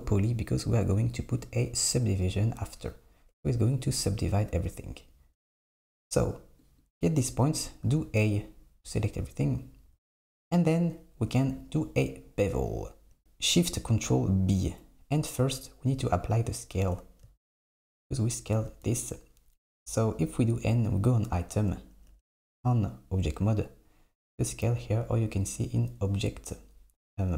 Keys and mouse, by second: 2.3 KP_7, 6.6 click, 7.9 a, 13.2 ctrl+shift+b, 18.8 n, 20.5 click, 22.1 Tab, 25.4 click.